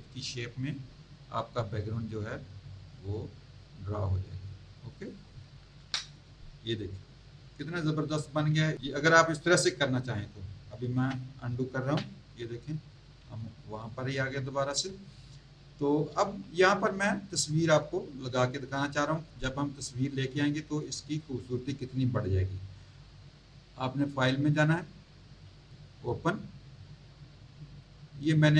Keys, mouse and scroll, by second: 2.9 click, 5.8 Return, 11.8 ctrl+z, 13.2 z, 13.7 click, 14.9 space, 15.0 click, 16.2 z, 16.5 alt+click, 24.1 click, 25.7 click, 27.8 scroll down 1.